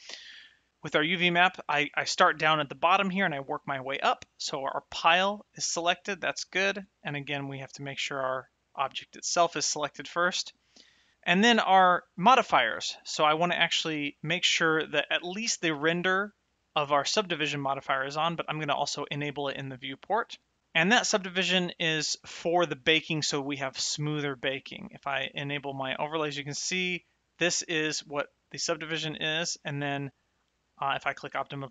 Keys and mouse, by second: 0.8 click, 8.6 click, 12.1 click, 18.3 click, 21.2 shift+middle click, 25.3 click, 31.1 click.